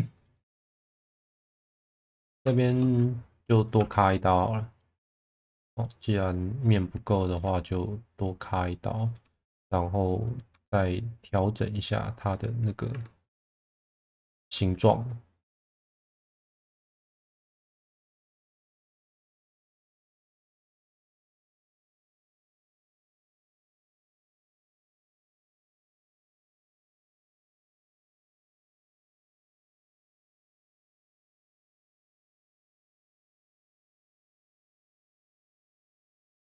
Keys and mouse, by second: 1.1 shift+click, 1.9 2, 2.6 shift+click, 2.9 right click, 3.7 1, 4.7 click, 5.5 2, 6.6-7.2 alt+middle drag, 11.4 click, 12.9 2, 13.2 click, 13.8 shift+click, 14.1 f, 16.0 1, 16.2 click, 18.1 click, 18.8 click, 20.4 click, 23.5 click, 23.9 click, 25.1 shift+middle click, 27.0 click, 29.0 click, 30.4 shift+middle drag, 31.4-32.3 middle drag, 32.6 2, 33.5-34.6 right drag, 36.3 2.